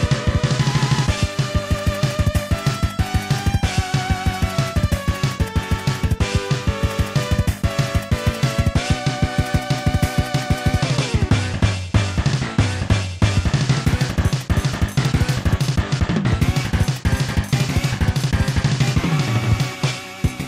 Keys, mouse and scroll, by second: 10.8 scroll up 1, 12.1 middle click, 13.9 i, 17.1 click, 17.3 i, 18.1 click, 18.3 i, 18.9 click, 20.2 click.